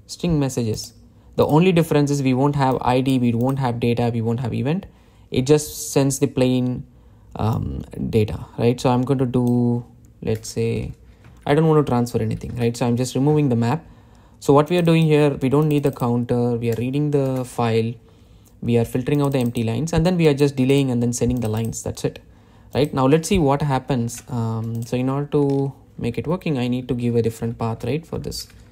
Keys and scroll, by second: 13.6 Delete, 25.1 super+s.